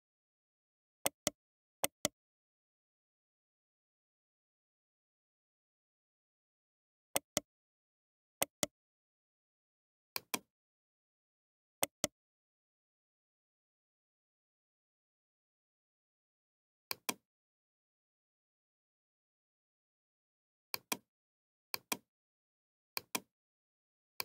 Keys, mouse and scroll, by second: 1.8 right click, 6.7 Tab, 7.1-10.0 right drag, 9.7 x, 11.4 Tab, 12.1 right click, 12.3 right click, 13.6 a, 13.8 a, 17.1-20.8 drag, 23.6 click.